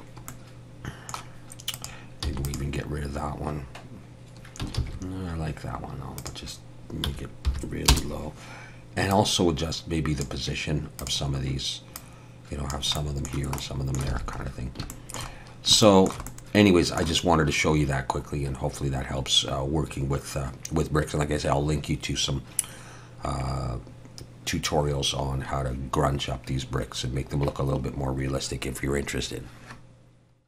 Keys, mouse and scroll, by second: 0.3 middle click, 1.7 click, 2.2 x, 4.8 ctrl+z, 6.2 click, 9.1 click, 13.0 click, 13.0 middle click, 13.6 middle click, 14.2 alt+a, 14.4 scroll up 1, 14.9 shift+middle click, 15.0 shift+middle click, 16.3 middle click.